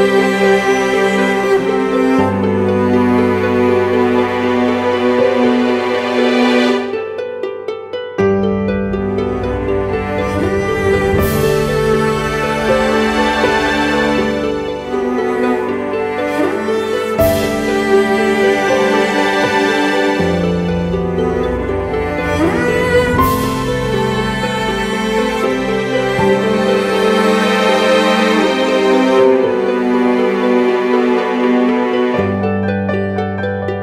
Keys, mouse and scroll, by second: 1.3 ctrl+t, 2.5 alt+shift+click, 10.7 3, 16.0 ctrl+t, 18.2 Return, 32.1 shift+click.